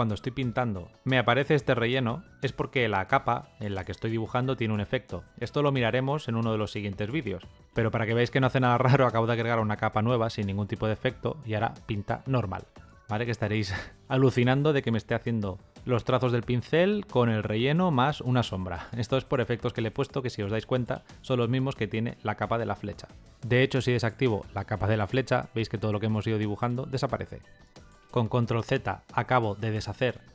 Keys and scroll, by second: 27.9 ctrl+z.